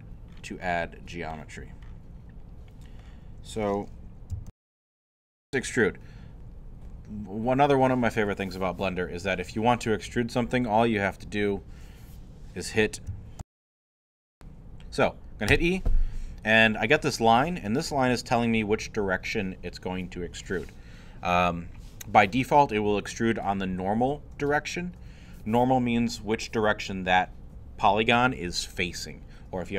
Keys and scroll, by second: 4.5 super+., 13.4 super+., 15.5 e.